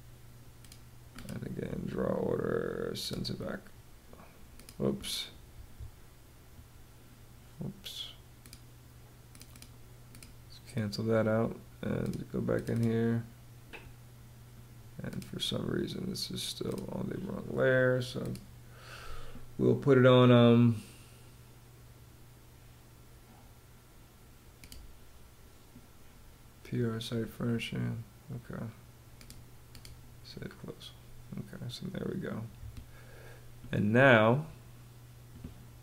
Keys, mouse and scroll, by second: 5.0 Escape, 7.9 click, 8.8 click, 9.6 click, 26.7 Escape.